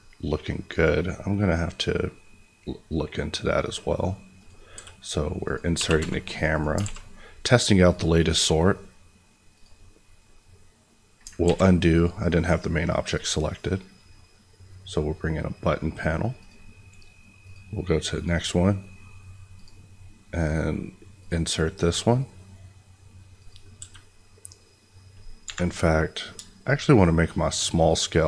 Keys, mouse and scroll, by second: 1.5-2.3 scroll down 1, 2.3-3.1 scroll up 1, 3.1-4.3 scroll down 1, 4.3 click, 4.7 s, 5.4 click, 5.7 g, 5.9 y, 6.5 click, 6.7 alt+a, 7.8 click, 11.4 ctrl+z, 11.9 click, 22.2-23.3 scroll down 1, 23.3 click, 23.7 s, 25.4 Escape, 26.8-28.2 shift+drag.